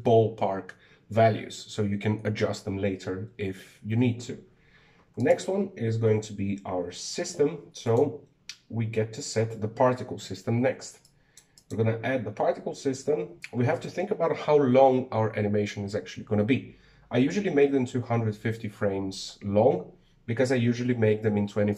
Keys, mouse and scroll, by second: 6.0 right click, 8.6 click, 11.8 click, 12.3 click.